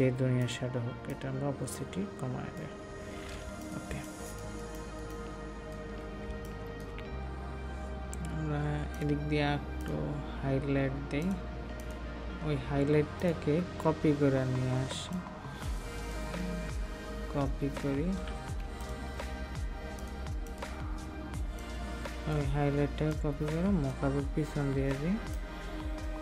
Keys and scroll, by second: 3.9 ctrl+space, 18.2 ctrl+z.